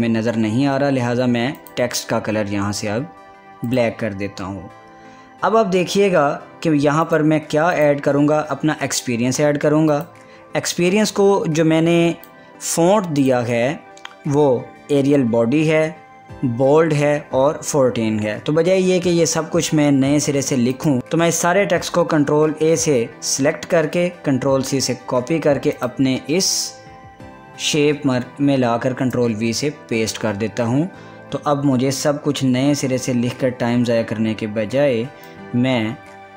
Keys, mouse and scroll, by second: 2.2 click, 4.3 click, 7.7 click, 8.7 click, 10.5-13.8 drag, 21.0 ctrl+c, 23.1 ctrl+a, 25.2 ctrl+c, 26.4 click, 27.2 click, 29.6 ctrl+v, 35.9-36.3 drag.